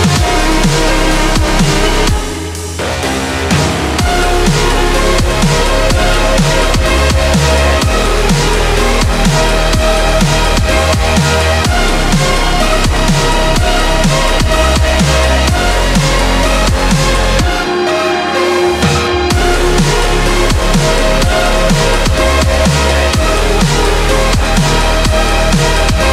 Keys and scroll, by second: 2.1 ctrl+z, 2.3 ctrl+z, 5.8 scroll up 1, 7.3 ctrl+z, 9.2 ctrl+z, 17.0 scroll up 1, 19.4 ctrl+z, 21.2 ctrl+z, 21.7 ctrl+z.